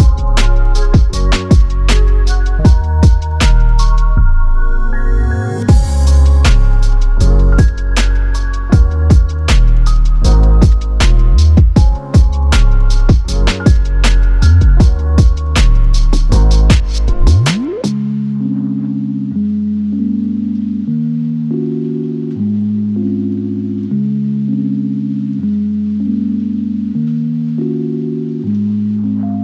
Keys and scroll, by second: 1.8-3.0 typing, 3.1 Return, 9.3-10.3 typing, 12.8 Return.